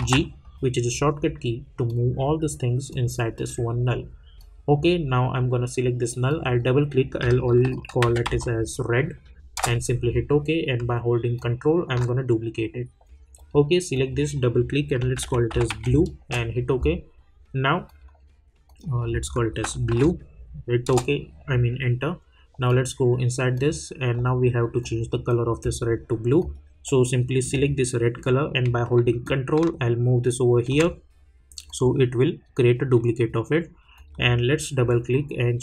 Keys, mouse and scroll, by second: 1.9 click, 7.7-8.2 typing, 9.5 Return, 11.4-13.3 ctrl+drag, 15.0-15.7 typing, 16.2 Return, 17.8 click, 19.9 shift+b, 20.8 Return, 22.6 click, 29.2-31.6 ctrl+drag, 33.9-35.6 drag.